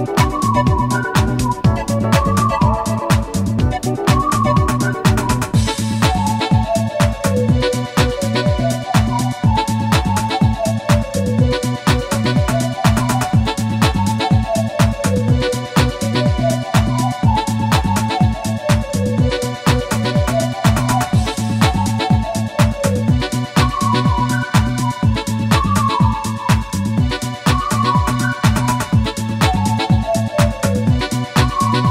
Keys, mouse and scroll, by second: 0.8 shift+click, 1.2 g, 2.1 shift+click, 2.5 s, 3.2 shift+click, 4.8-5.1 shift+scroll up 1, 5.3 shift+middle click, 6.0 g, 7.8 shift+click, 8.3-8.9 shift+middle drag, 9.0 shift+scroll down 1, 9.9-14.0 shift+drag, 16.2 click, 17.2 1, 17.9 6, 18.2 0, 19.6 Return, 22.0 i, 24.4 click, 28.3 F12, 29.7 scroll down 1, 30.8-31.9 middle drag.